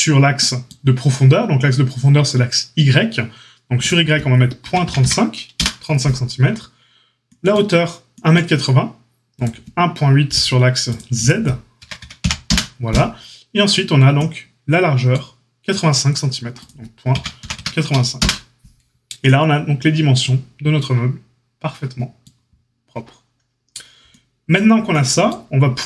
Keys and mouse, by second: 3.7-10.9 drag, 10.9 middle click, 11.3-25.8 drag.